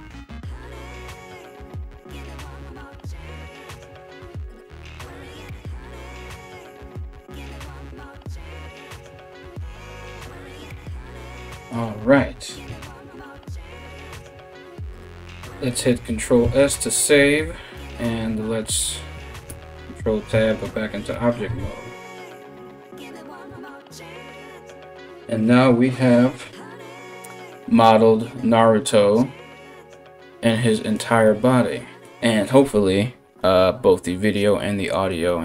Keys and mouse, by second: 16.2 ctrl+s, 19.1 ctrl+Tab, 21.1 a, 21.2 a.